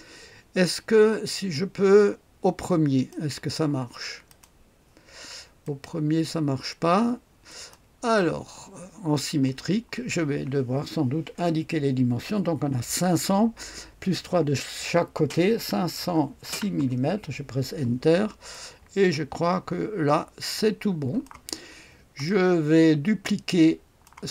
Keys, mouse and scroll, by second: 1.3-3.1 drag, 4.3 click, 5.6 click, 7.5 click, 15.5 KP_5, 16.0 KP_0, 16.5 KP_6, 16.8 Return, 18.0-18.5 scroll down 1, 18.5-21.9 drag, 22.3-24.3 drag.